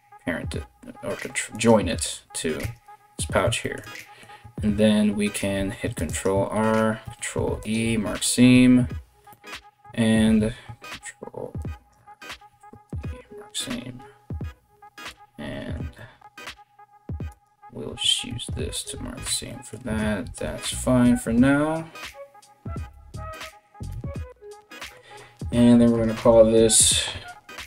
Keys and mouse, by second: 1.1 right click, 1.3-27.6 middle drag, 2.2 Tab, 5.2 ctrl+r, 6.6 ctrl+e, 10.0 ctrl+r, 12.1 ctrl+e, 16.9 alt+right click, 17.9 ctrl+e, 18.9 a, 20.2 y, 22.4 u, 23.5 Tab, 25.5 click, 25.7-27.6 drag.